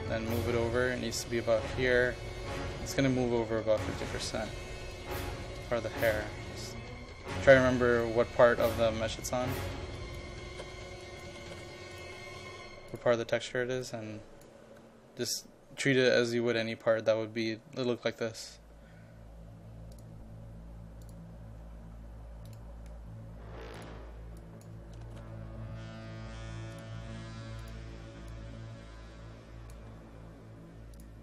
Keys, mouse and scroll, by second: 5.1 KP_5, 5.6 click, 10.3-11.6 typing, 11.1 click, 12.0 click, 14.9 KP_5, 20.0 click, 24.8 KP_0, 25.1 KP_Decimal, 25.3 KP_5, 26.8-29.9 drag, 30.0 KP_5, 31.0 click.